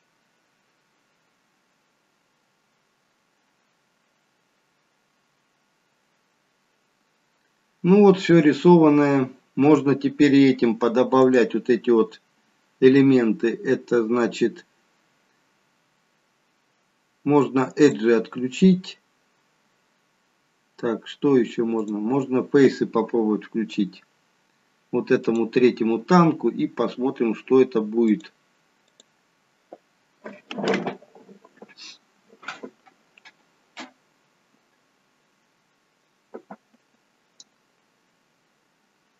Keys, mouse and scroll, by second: 12.6-15.6 scroll up 2, 17.8 click, 21.7 click, 25.1 click, 28.0 click.